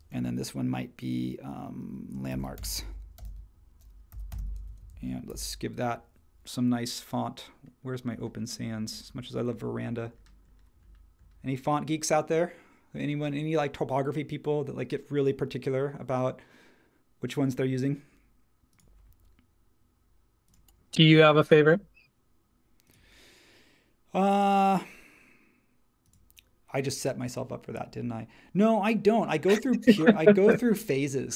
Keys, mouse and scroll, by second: 2.0-4.9 typing, 5.3 super+t.